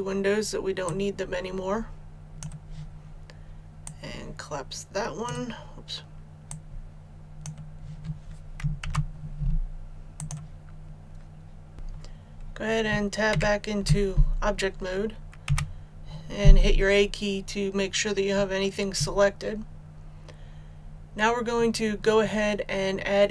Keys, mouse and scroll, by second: 8.7 shift+s, 10.1 click, 13.2 Tab, 15.4 a.